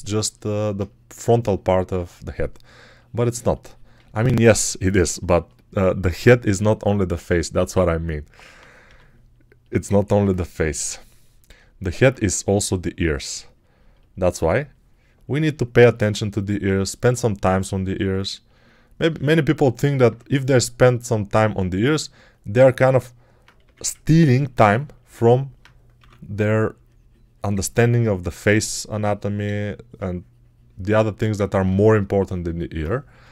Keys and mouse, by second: 8.7 g, 23.5 1, 25.8 6, 33.0 g.